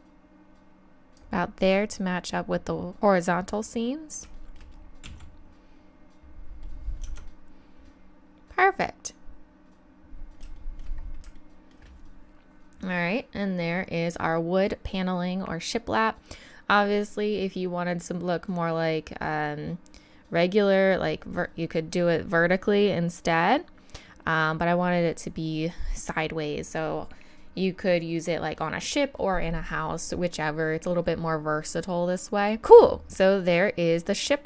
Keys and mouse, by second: 3.6 middle click, 5.1 z, 7.0 Tab, 10.6-16.5 middle drag, 33.0-34.4 drag.